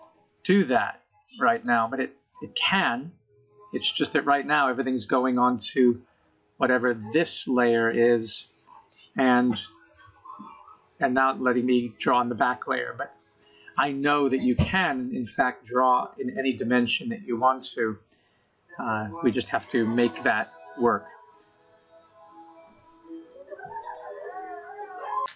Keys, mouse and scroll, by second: 0.2 click, 1.2 middle click, 3.6-4.2 scroll down 4, 4.9 click, 7.5 middle click, 8.9-9.3 scroll down 3, 9.3-10.2 scroll up 7, 10.2-11.0 scroll down 5, 11.0-12.0 scroll up 4, 12.0-12.7 scroll down 5, 13.6 middle click, 16.0 middle click, 19.5 KP_0, 20.5-21.7 scroll up 1, 21.7 scroll up 1.